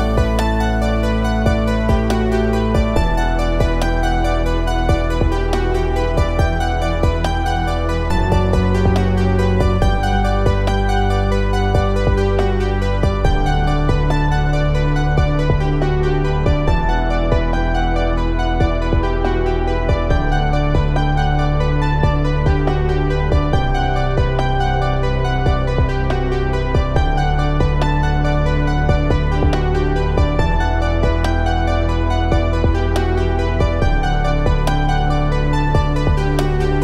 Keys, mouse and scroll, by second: 2.5 click, 10.9-12.7 drag, 17.5 click, 20.2 click, 24.5 click, 27.7 click, 34.7 click.